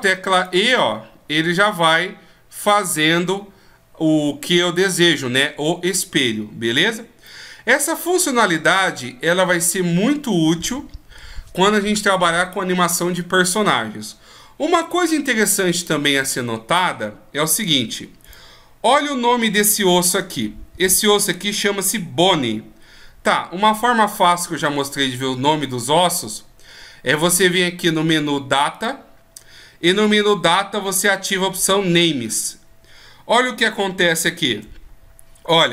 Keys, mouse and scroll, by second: 6.9 middle click, 17.8 right click, 28.3 click, 32.0 click, 33.5 shift+scroll down 1, 34.4 scroll up 3.